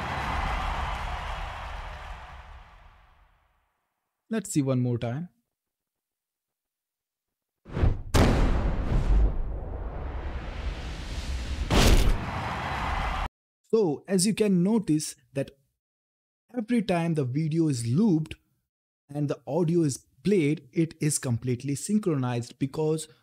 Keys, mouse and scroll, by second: 6.6 typing, 8.4-9.4 typing.